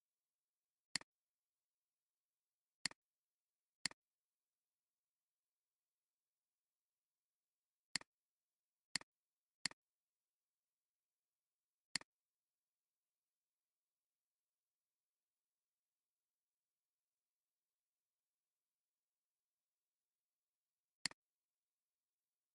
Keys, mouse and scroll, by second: 0.6 alt+scroll down 1, 0.9 space, 2.0 alt+scroll down 1, 2.5 alt+scroll up 1, 3.2 space, 15.9-19.6 typing, 21.2 click, 22.0 click.